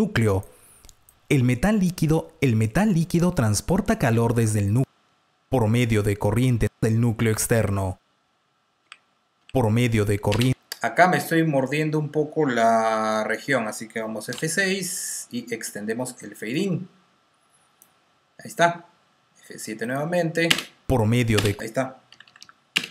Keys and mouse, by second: 0.0 Delete, 0.0 click, 10.6 click, 10.6 t, 10.6 space, 14.2 F6, 16.8 click, 19.4 F7, 19.7 click, 20.4 space, 21.8-22.6 typing.